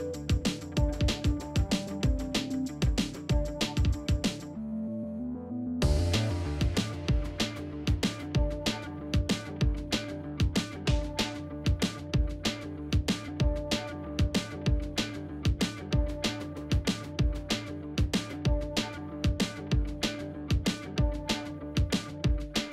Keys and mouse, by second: 1.3 e, 2.8 g, 6.1 r, 7.7 g, 8.6 s, 9.4 Tab, 9.5 middle drag, 9.8 alt+z, 10.0 middle drag, 11.2 middle drag, 11.6 shift+middle drag, 11.9 Tab, 12.2 alt+z, 12.5 middle click, 12.9 middle click, 13.7 alt+z, 14.0 alt+z, 14.0 middle click, 14.5 middle click, 15.3 ctrl+shift+b, 18.7 alt+z, 19.7 KP_1, 20.1 shift+middle click, 20.4 alt+z, 20.6 shift+middle click, 21.0 click, 21.6 g, 22.4 middle click.